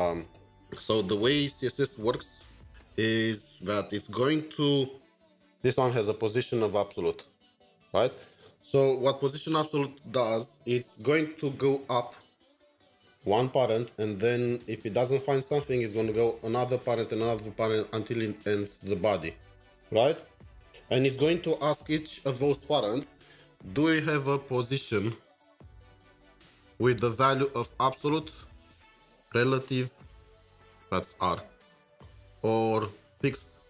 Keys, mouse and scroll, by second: 2.7 double click, 4.0 ctrl+shift+3, 5.1 double click, 6.7 double click, 7.9 double click, 14.8 double click, 25.5 double click, 25.6-26.1 double click, 25.9 double click, 26.4-28.8 double click, 29.4-31.7 double click, 31.6 double click, 31.9 double click.